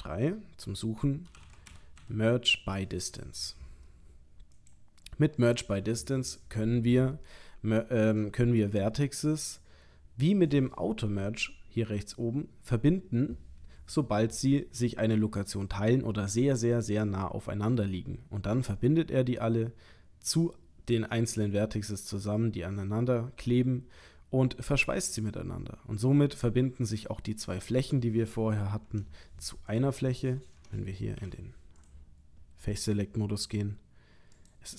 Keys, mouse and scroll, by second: 28.8 Tab, 29.7 click, 30.6 Tab, 31.2 3, 31.8 click, 33.4 g.